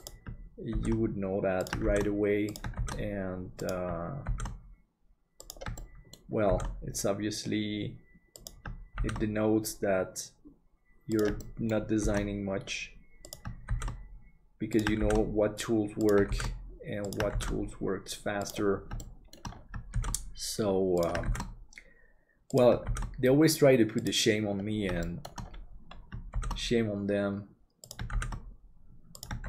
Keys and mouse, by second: 5.7 shift+middle click, 11.5 shift+middle click, 19.0 shift+middle click, 25.1 middle click, 26.3 shift+d.